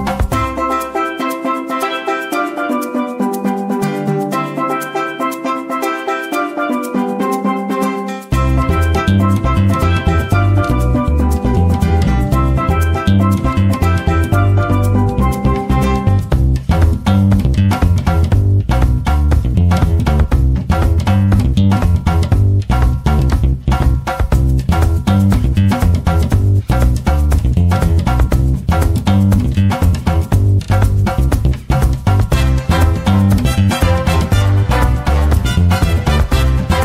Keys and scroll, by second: 0.0-0.6 typing, 26.4-27.7 typing.